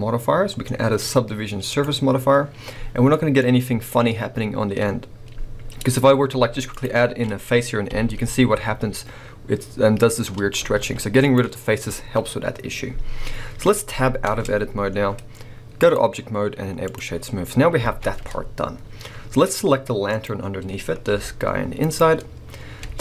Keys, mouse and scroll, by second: 2.6 scroll down 1, 3.1-5.8 middle drag, 3.4 scroll up 1, 5.3 scroll down 1, 5.8 scroll up 1, 5.8-7.9 right drag, 6.7 alt+shift+click, 7.9 f, 8.3-8.7 scroll up 2, 8.7-10.7 middle drag, 8.7-10.7 scroll down 2, 10.7 x, 13.1 middle click, 13.1 scroll down 2, 14.3 Tab, 15.8-20.2 drag, 17.3-17.8 scroll down 1, 17.8 alt+a, 19.4 scroll up 1, 21.1 g, 21.9 right click, 22.8 Tab.